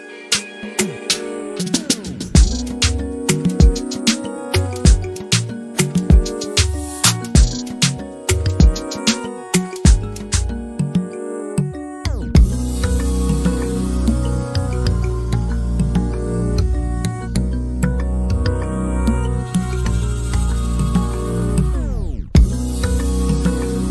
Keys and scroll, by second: 8.1-9.3 typing, 9.8 Return.